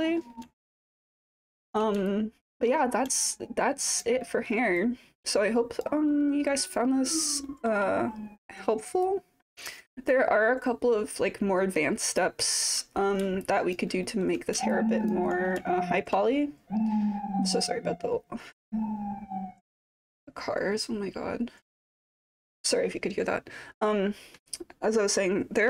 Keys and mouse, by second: 0.6-1.1 alt+drag, 1.4-1.8 alt+middle drag, 2.1-2.7 alt+drag, 3.2-4.1 alt+drag, 4.2-4.5 alt+middle drag, 4.8-5.9 alt+drag, 6.1-6.5 alt+middle drag, 6.7-7.3 alt+drag, 7.4-7.8 alt+middle drag, 9.0 click, 10.1-12.2 alt+drag, 12.4 alt+middle drag, 13.4-13.7 alt+drag, 14.0 alt+middle drag, 14.7-15.1 alt+drag, 15.7 alt+middle drag.